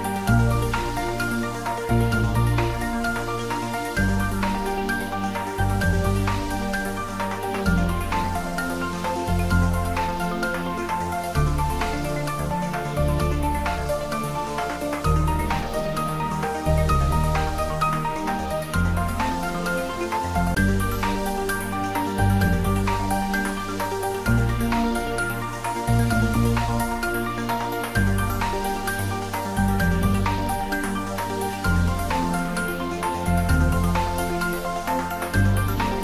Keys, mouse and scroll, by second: 0.6 shift+z, 1.5 shift+click, 2.6 shift+click, 4.2 g, 8.9 click, 9.5 r, 12.5 click, 13.4 g, 19.5 click, 21.8 shift+click, 24.8 g, 28.6 click, 29.7 r, 30.9 Down, 34.2 Left.